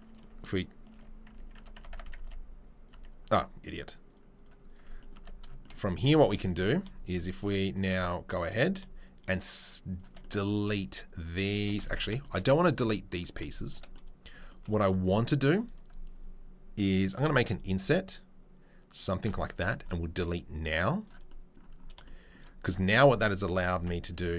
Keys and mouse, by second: 0.1 Tab, 0.9 Tab, 1.3 Tab, 1.5 Tab, 1.8 Tab, 1.9 Tab, 2.1 Tab, 2.1 Tab, 2.9 Tab, 4.0 click, 5.1 Tab, 5.9 3, 6.3 click, 6.3 middle click, 7.0 shift+click, 7.0 shift+middle click, 8.1 3, 10.8 shift+click, 10.8 shift+middle click, 10.8 shift+right click, 12.7 ctrl+z, 14.0-23.7 right drag, 19.8 Delete, 23.4 Tab, 23.7 Tab.